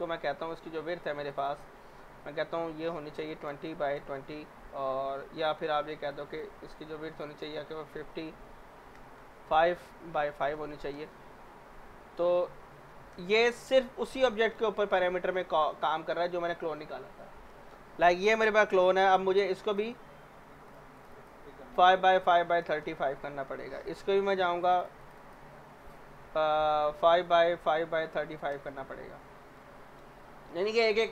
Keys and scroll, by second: 3.0-4.4 typing, 7.8-11.4 typing, 12.6-13.3 typing, 21.4-23.1 typing, 26.9-28.7 typing, 27.1 Tab.